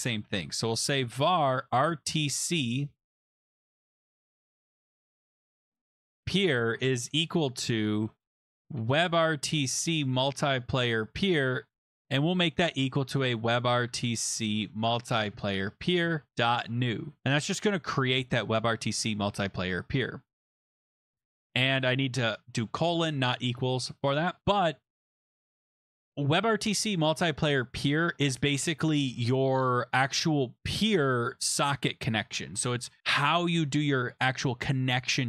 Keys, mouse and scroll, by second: 0.0-7.1 typing, 8.3-10.6 typing, 11.8-14.5 typing, 15.0 Down, 15.2 Down, 15.3 Down, 16.0 Up, 16.0 Return, 16.0-17.1 typing, 21.2 click, 21.6 BackSpace, 22.0 shift+;, 24.9 click, 25.6 click, 25.6 click.